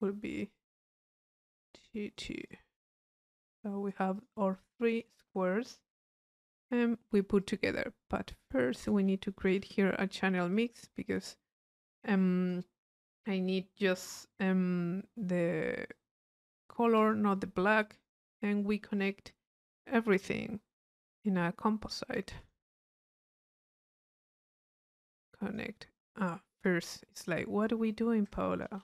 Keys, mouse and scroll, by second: 0.5 click, 1.8 click, 2.8-3.9 right drag, 3.9 click, 4.2-5.3 drag, 7.4 click, 8.3 click, 10.3 c, 10.6-12.9 drag, 15.9-16.9 drag, 17.8 click, 21.8 click, 22.4 Tab, 22.8 c, 23.8 click, 24.5 click, 25.1 click, 26.3 middle click, 26.7 click, 27.6-28.8 drag.